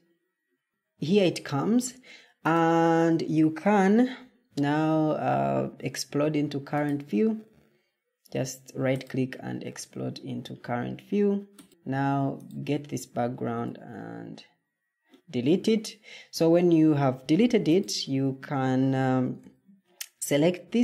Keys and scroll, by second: 11.7 Escape, 13.5 Delete.